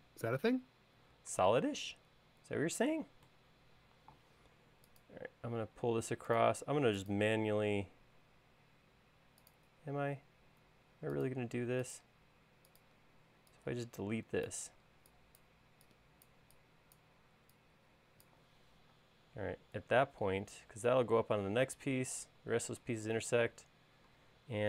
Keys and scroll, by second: 3.7 l, 8.5 l, 13.1 e, 19.1 space.